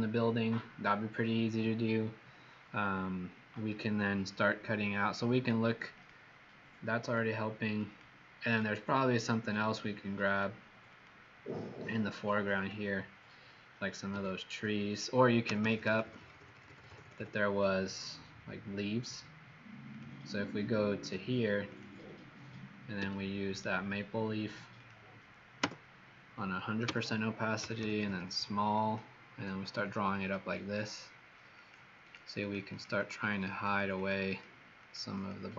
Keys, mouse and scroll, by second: 5.9 click, 7.0 click, 8.4 click, 10.2 click, 10.8 click, 12.5 click, 14.0 b, 15.4-17.1 typing, 19.8 click, 21.6 click, 22.9 b, 23.4 right click, 24.7 click, 25.6 Return, 26.8-28.3 typing, 28.7 click, 29.3-29.9 typing, 30.2 click, 31.5 click, 32.0 click, 32.4 click, 32.6 click, 32.9 click, 33.4 click, 33.7 click, 33.9 click, 34.2 click, 34.7 click, 35.1 click, 35.4 click.